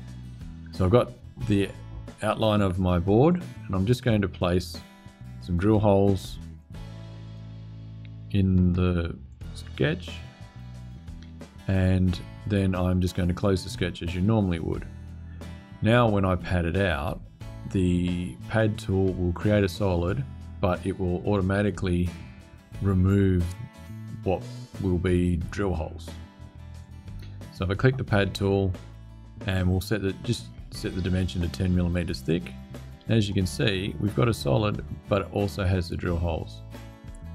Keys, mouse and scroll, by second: 3.0 click, 4.2 click, 6.2 click, 7.0 click, 9.0 click, 9.8 click, 13.3 click, 26.5 click, 32.0 click, 33.0-35.8 drag, 35.9 click.